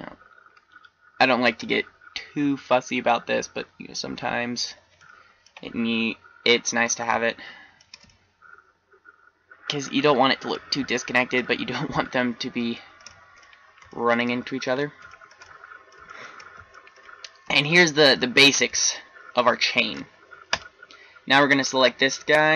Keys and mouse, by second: 3.6 click, 4.9-8.1 middle drag, 8.3-8.6 middle drag, 11.9 middle click, 12.9 middle drag, 13.2-13.9 middle drag, 14.0-14.7 middle drag, 15.2-15.6 middle drag, 19.0-19.4 middle drag.